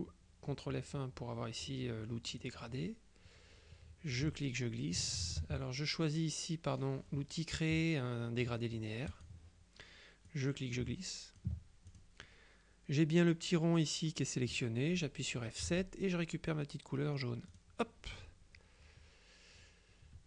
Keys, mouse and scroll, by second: 2.5 click, 4.2-5.6 ctrl+drag, 5.3 ctrl+z, 9.2 click, 10.4-12.6 drag, 15.7 F7, 17.6 click.